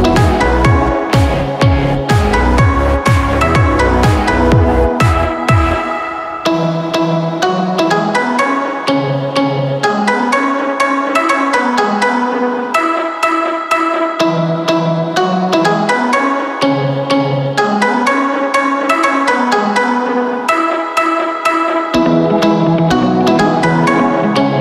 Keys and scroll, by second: 1.1 Return, 3.6 b, 5.6 ctrl+KP_Add, 6.3 space, 7.0 ctrl+KP_Add, 7.5 ctrl+KP_Subtract, 7.9 space, 13.6 space, 14.4 KP_Subtract, 14.8 KP_Subtract, 15.3 KP_Subtract, 15.9 KP_Subtract, 16.4 KP_Add.